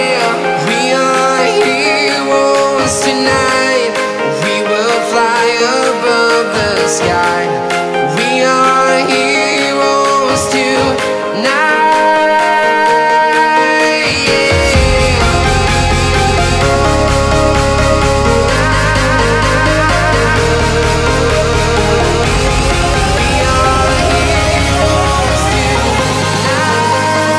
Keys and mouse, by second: 2.2 space, 6.6 t, 9.8 click, 12.0 space, 13.4-13.9 shift+middle drag, 15.3 shift+a, 18.1 r, 19.2 KP_9, 19.4 KP_0, 20.1 x, 20.5-24.2 drag, 25.0 s, 26.8 click.